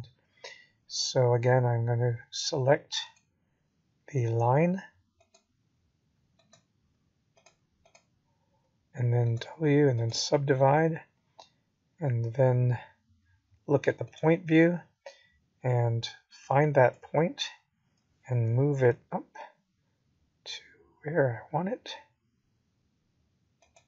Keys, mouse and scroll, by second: 0.3 g, 4.7 middle click, 8.5 KP_1, 9.1-10.1 scroll up 4, 10.6 g, 17.3 shift+middle click, 21.5 click, 23.7 click.